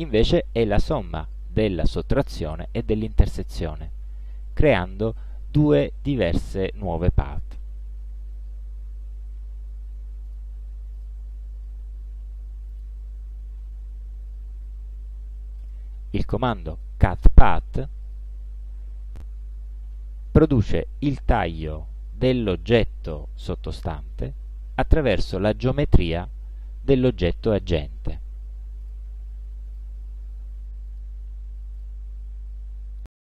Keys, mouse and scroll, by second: 0.2-1.5 drag, 4.6 click, 10.4 click, 11.1 shift+click, 12.8 click, 15.7 click, 16.8 click, 18.1 click, 20.5-21.8 drag, 24.3 click, 28.9 click, 29.8 click, 31.0 click, 31.9 click.